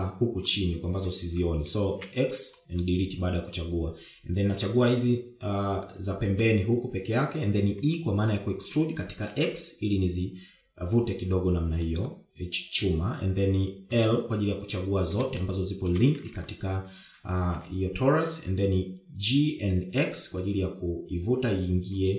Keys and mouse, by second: 1.2 middle click, 2.4 KP_7, 3.2 x, 4.9-6.1 drag, 9.0 e, 16.6 shift+middle click, 18.1 g.